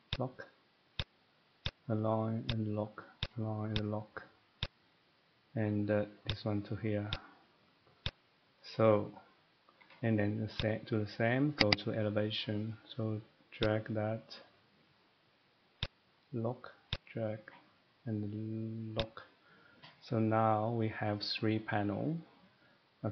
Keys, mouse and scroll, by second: 0.1 click, 1.0 click, 1.6 click, 2.5 click, 2.7 typing, 3.2 click, 3.8 click, 4.6 click, 6.3 click, 7.1 click, 7.9 middle click, 8.0 click, 8.6 middle click, 8.6 scroll up 1, 8.7-9.1 scroll down 3, 9.1 middle click, 9.8 Escape, 10.6 click, 11.6 click, 11.8 click, 12.0-12.7 scroll, 12.7 middle click, 14.9 click, 15.8 click, 17.5 click, 19.0 click, 19.6 middle click.